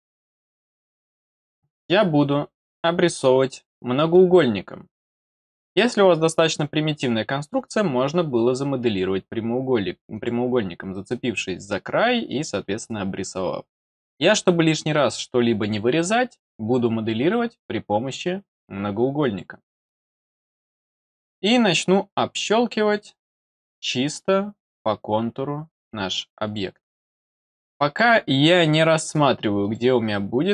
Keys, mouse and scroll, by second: 0.1 click, 7.5 click, 10.1 click, 19.2 click, 21.5 click, 23.7 click, 26.4 click, 27.8 click, 29.6 click.